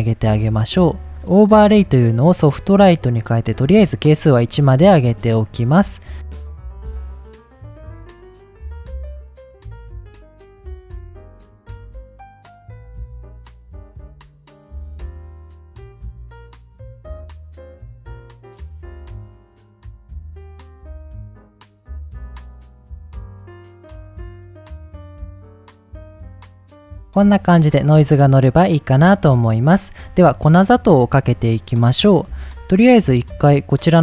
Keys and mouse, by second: 0.4 middle click, 1.0 middle click, 1.2-2.3 drag, 3.0 click, 4.1 middle click, 4.9 middle drag, 5.4 middle click, 6.1 drag, 6.5 ctrl+z, 7.5 click, 8.0 click, 8.6 click, 10.1 middle click, 10.3 click, 10.9 middle click, 11.1 click, 11.6 ctrl+shift+click, 11.9 middle click, 13.0 middle click, 14.5 drag, 14.7-15.1 drag, 15.3 click, 16.3 middle click, 16.6 click, 17.6 click, 18.0 middle click, 18.6-19.9 drag, 20.1 click, 20.5 click, 20.9 click, 21.3 click, 22.3 middle click, 22.9 middle click, 23.3 middle click, 23.6 click, 24.7-26.1 drag, 28.2 middle click, 32.1 middle click, 33.5 click.